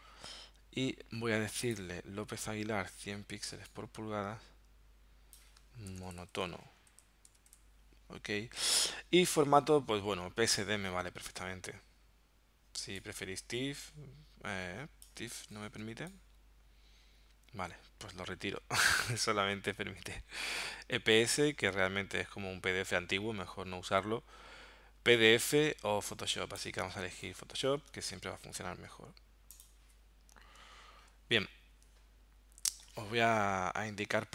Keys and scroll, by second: 5.9-7.5 typing, 32.6 super+w.